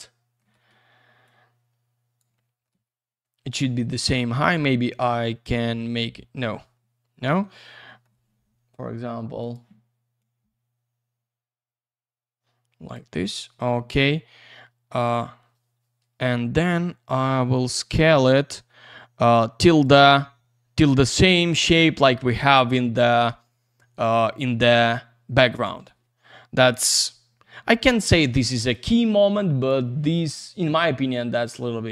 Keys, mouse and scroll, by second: 1.2 click, 2.3 alt+middle click, 2.7 c, 3.6 F3, 4.1 alt+q, 7.9 middle click, 9.4 click, 10.2 click, 14.4 F3, 17.5 click, 25.8 alt+shift+q, 26.9 F3, 28.7 shift+click.